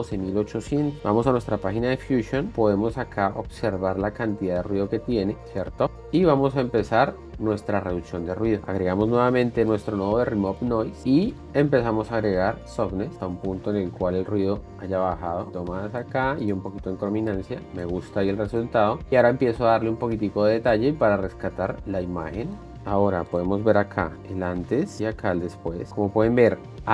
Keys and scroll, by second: 1.2 shift+5, 5.5 space, 24.3 1.